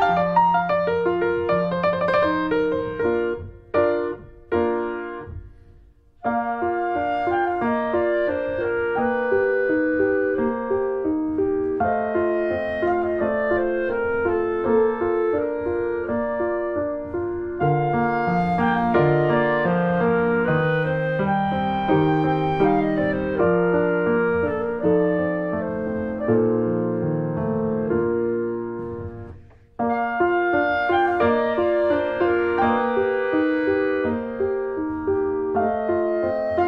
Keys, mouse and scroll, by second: 0.7 r, 7.5 alt+middle click, 7.6-8.3 alt+scroll up 2, 7.8 alt+z, 8.3 shift+middle click, 9.1-9.8 scroll up 3, 9.5 shift+middle click, 10.1 click, 12.0 middle click, 12.8 click, 13.2 middle click, 14.1 click, 14.2 alt+middle click, 14.6 alt+z, 15.0 alt+middle click, 15.6 alt+scroll down 2, 16.1-17.5 alt+middle drag, 17.5 click, 17.7-18.3 scroll up 3, 17.9 shift+middle click, 18.3 click, 19.4 click, 20.7 middle click, 21.1 alt+z, 21.3 scroll down 1, 21.5 middle click, 22.0 click, 22.4 scroll down 1, 22.7 middle click, 23.6-23.9 scroll down 1, 23.9 middle click, 24.3 z, 24.6 click, 24.8 click, 25.2 s, 27.6 middle click, 28.3 click, 31.2 click, 31.5 middle click, 31.8 scroll up 1, 32.0 shift+middle click, 32.8-33.2 scroll up 1, 33.2 middle click, 33.8 click, 34.1 scroll down 1, 35.2 click, 35.8 scroll down 1, 36.0 middle click, 36.4 click.